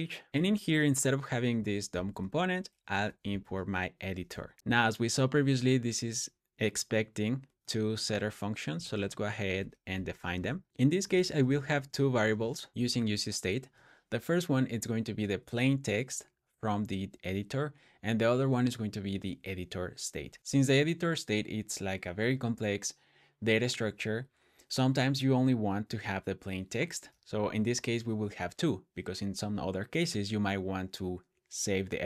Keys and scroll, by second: 0.3 Escape, 0.3 BackSpace, 0.3 k, 1.8-5.1 typing, 9.8 Escape, 9.9 Escape, 9.9-12.1 typing, 11.2 Return, 12.7 Return.